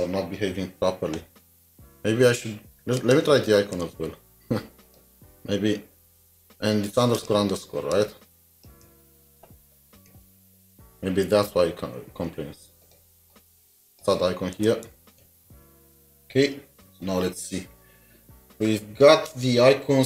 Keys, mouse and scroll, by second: 3.7 typing, 3.8 alt+shift+Down, 8.7 alt+s, 8.9 ctrl+d, 9.1 ctrl+d, 13.3 double click, 14.7-15.7 typing.